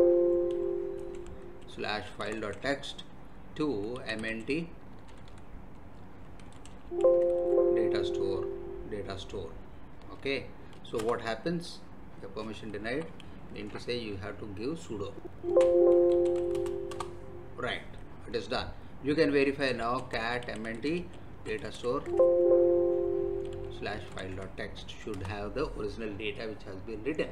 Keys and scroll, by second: 1.0-4.9 typing, 6.2-7.4 typing, 11.0 Return, 12.8 Up, 13.2 Left, 15.9 s, 16.5 space, 16.9 Return, 19.5-22.0 typing, 22.0 Tab, 23.2-24.6 typing, 25.1 Return.